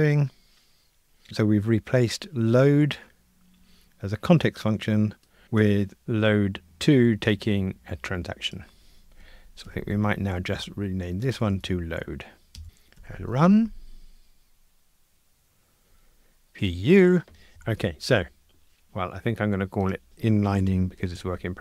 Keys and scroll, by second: 9.7 shift+F6, 13.0 ctrl+r, 17.5 super+k.